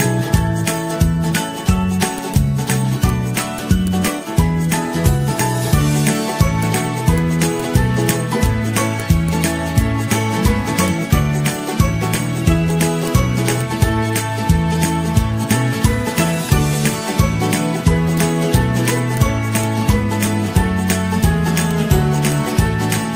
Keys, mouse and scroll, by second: 0.0 ctrl+-, 1.3 t, 4.2-6.4 typing, 9.1-10.3 typing, 13.5-18.1 typing, 13.7 ctrl+a.